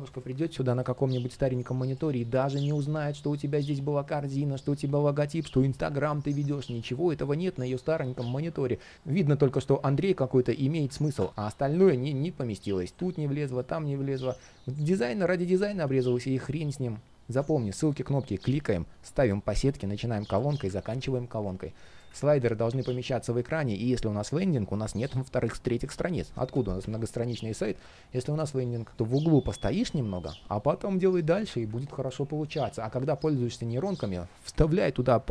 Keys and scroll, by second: 2.0 super+z, 20.7 super+z.